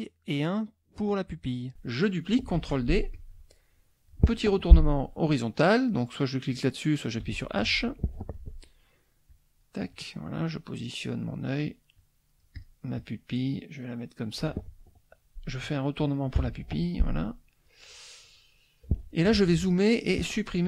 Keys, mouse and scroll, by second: 1.1 shift+click, 2.6 ctrl+d, 3.1-4.3 ctrl+drag, 6.4 click, 7.2 h, 9.3 click, 9.9-11.3 drag, 12.0 click, 12.9-14.6 drag, 16.4 h, 16.8-17.8 drag, 18.2 click, 19.3 z, 19.4 click.